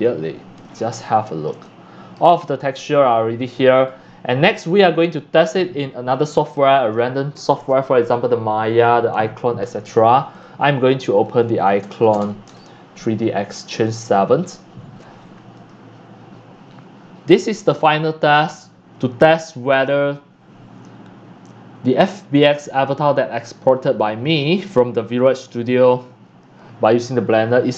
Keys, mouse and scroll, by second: 1.3-2.4 shift+drag, 2.4-2.9 scroll up 4, 2.9 click, 3.9-6.8 drag, 9.7 click, 10.4-11.6 drag, 11.4-12.7 typing, 13.8-15.8 drag, 18.7-22.6 drag, 26.4-27.7 drag.